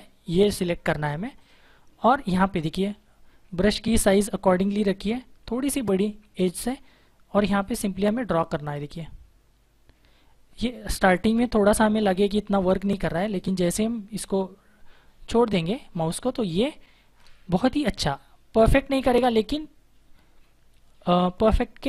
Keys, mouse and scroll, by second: 1.3 click, 3.2 ], 5.3-6.0 typing, 7.8 click, 14.9-16.0 scroll up 1, 16.0 space, 16.3 click, 16.5 space, 18.0 click.